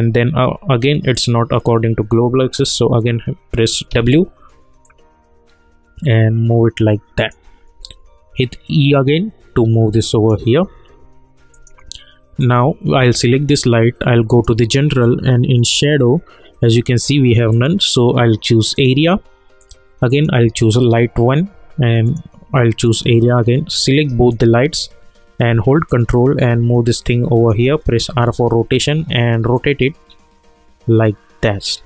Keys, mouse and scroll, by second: 3.9 w, 4.8-7.8 drag, 7.8 e, 8.9-11.5 drag, 24.3 shift+click, 25.9-28.1 ctrl+drag, 28.1 r, 29.5-31.8 drag.